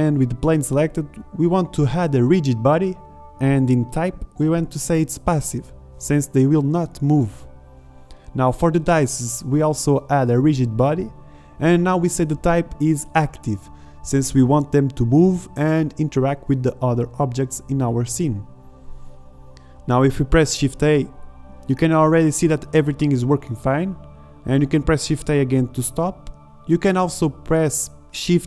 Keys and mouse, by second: 2.8-10.8 drag, 10.8-13.5 middle drag, 21.3 alt+a, 25.8 alt+a.